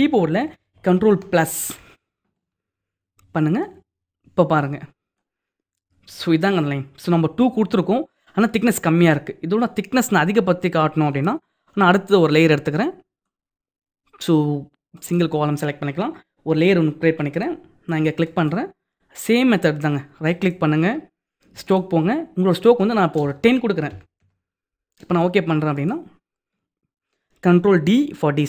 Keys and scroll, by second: 1.1 ctrl+=.